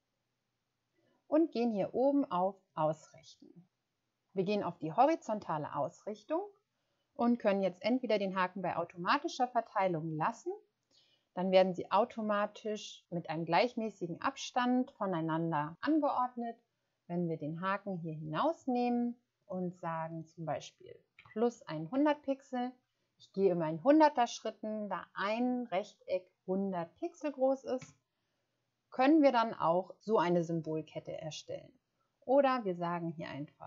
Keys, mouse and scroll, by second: 21.1-21.9 typing.